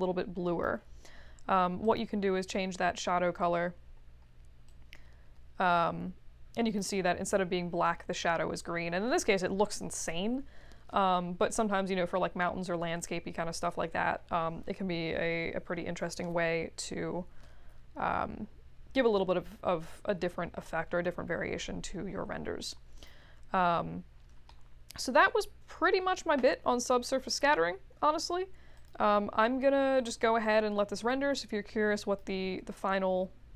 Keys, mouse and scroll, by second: 1.8 click, 4.8-6.9 drag, 22.9 click, 23.9-24.2 scroll down 2, 24.4-25.2 alt+middle drag, 28.7 click, 29.9 click, 31.1-32.1 drag.